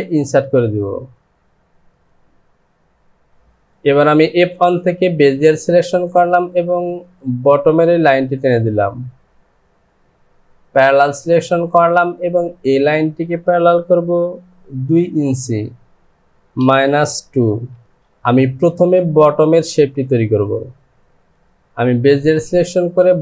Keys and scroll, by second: 16.5 KP_Subtract, 17.7 KP_2, 17.9 Return.